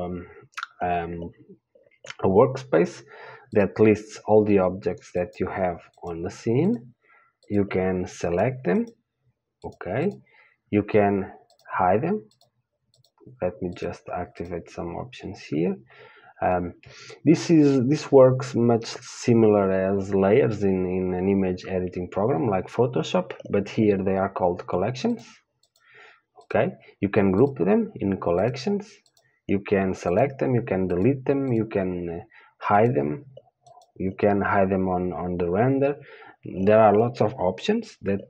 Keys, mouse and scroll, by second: 3.9-38.2 drag.